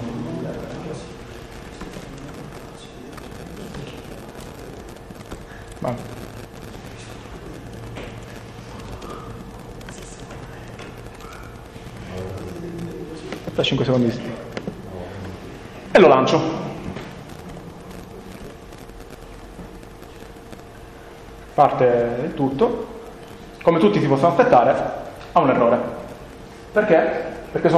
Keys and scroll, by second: 0.0-3.3 typing, 4.5 ctrl+BackSpace, 4.6-8.2 typing, 7.7 alt+è, 8.7 Right, 10.7 5, 11.1 Right, 18.4 F5.